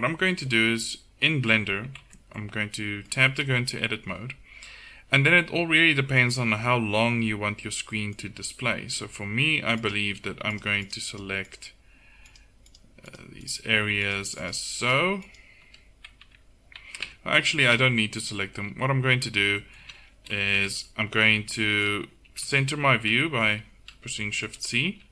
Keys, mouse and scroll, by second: 2.1 Tab, 4.7 KP_1, 4.9 middle click, 9.8-12.6 drag, 16.3 Tab, 17.1 Tab, 17.8 a, 19.2 Tab, 19.8 a, 20.6 KP_1, 22.3 shift+c.